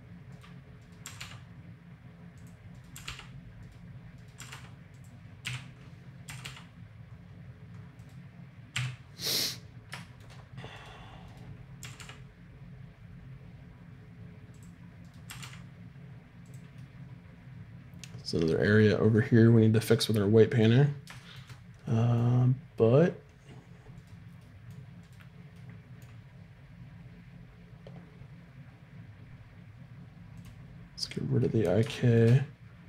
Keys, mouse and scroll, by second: 0.8 right click, 1.0 r, 2.9 r, 4.4 r, 5.4 o, 6.2 r, 10.7-13.1 right drag, 11.8 r, 15.1 click, 15.3 r, 18.8 middle click, 19.8-20.8 middle drag, 23.9-28.3 right drag, 24.4-26.7 drag, 30.3 click, 31.1-32.3 middle drag, 31.1 right click.